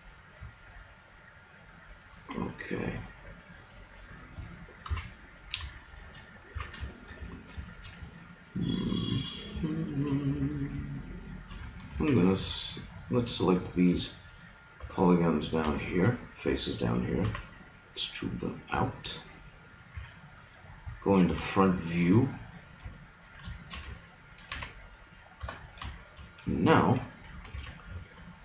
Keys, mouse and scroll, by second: 0.0 middle click, 5.0 KP_3, 6.6 z, 7.2 Tab, 12.0 ctrl+Tab, 14.8 b, 15.6 b, 17.3 e, 19.6 click, 20.0 a, 21.4 KP_1, 24.6 ctrl+r, 27.6 ctrl+Tab.